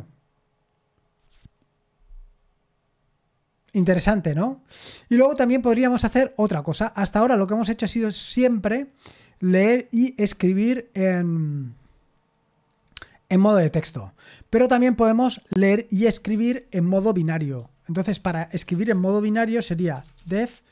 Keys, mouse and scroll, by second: 3.8 Escape, 14.4-15.6 scroll down 1, 15.6-17.5 scroll down 1, 17.3-20.7 typing, 19.3 Return.